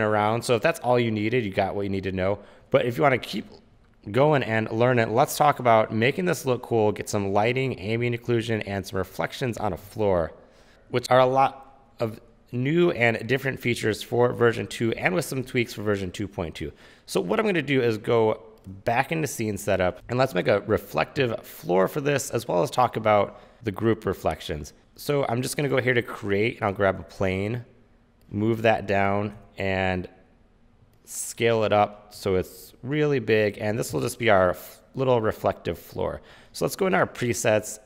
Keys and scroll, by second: 21.3 w, 29.5 r, 33.6-34.5 typing.